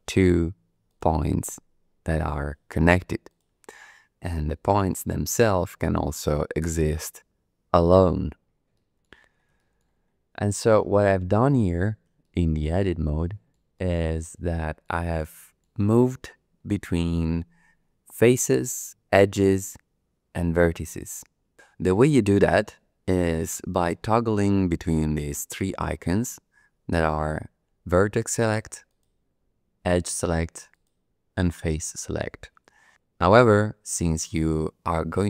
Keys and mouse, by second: 0.9 click, 2.4 click, 3.3 click, 4.9 shift+d, 5.3 z, 6.6 click, 8.7 click, 9.6 shift+click, 10.8 shift+click, 11.4 click, 12.2 shift+click, 13.2 shift+click, 13.7 click, 14.2 middle click, 14.5 shift+click, 15.3 shift+click, 16.7 click, 28.9 click, 30.7 click.